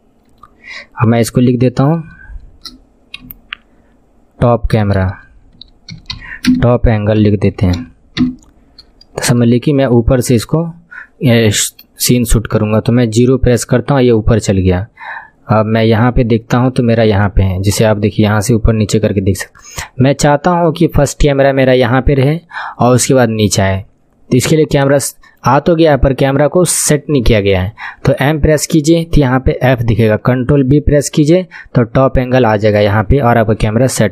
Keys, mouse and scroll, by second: 4.9 BackSpace, 13.2 KP_0, 15.8 KP_1, 16.1 scroll down 6, 16.8 shift+middle click, 17.6 click, 24.8-28.2 drag, 28.2 m, 30.7 ctrl+b.